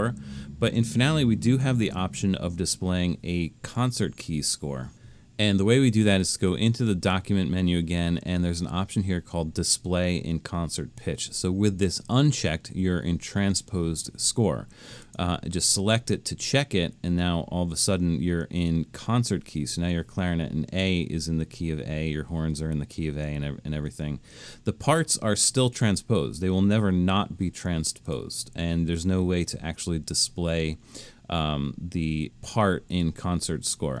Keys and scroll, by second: 1.8 super+-.